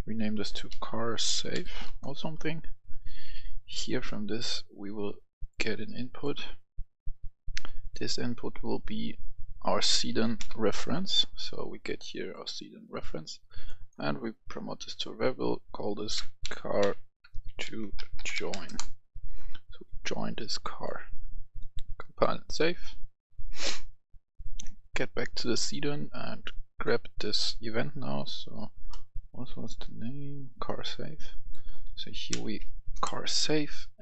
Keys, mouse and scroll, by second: 0.1-1.5 typing, 1.7 Return, 2.4 scroll up 1, 5.3 click, 9.0 click, 9.5-10.3 typing, 12.2 click, 16.0-18.4 typing, 18.5 Return, 19.9 click, 23.2 right click, 24.3 click, 26.6 click, 31.5-32.2 typing, 32.8 Return, 33.8-34.0 drag.